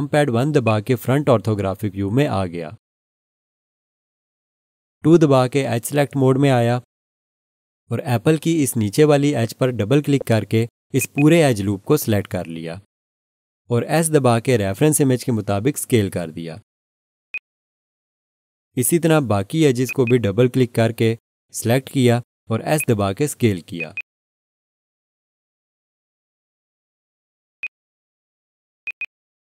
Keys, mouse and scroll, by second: 0.6 click, 1.6 1, 6.0 2, 9.2 scroll up 1, 11.0 click, 11.1 double click, 14.4 s, 17.3 click, 20.0 double click, 21.4 s, 22.8 click, 23.9 double click, 25.0 s, 27.6 click, 29.0 double click, 29.4 s.